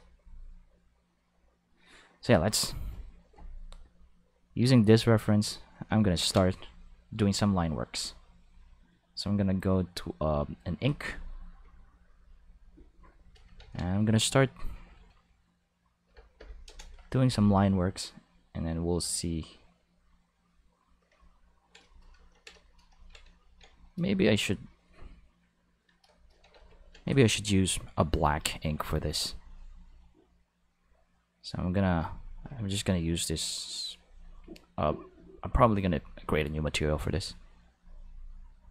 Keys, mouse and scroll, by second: 4.3-5.6 drag, 6.1 ctrl+z, 7.2 click, 7.8 click, 8.4 click, 10.6 click, 12.1-13.2 drag, 13.5 ctrl+z, 14.4 click, 16.1 4, 16.4 0, 16.7 Return, 18.2-21.1 drag, 26.5 ctrl+z, 28.1 click, 32.0 click, 34.0 click, 37.0 click, 37.7 click, 38.0 click, 38.6 click.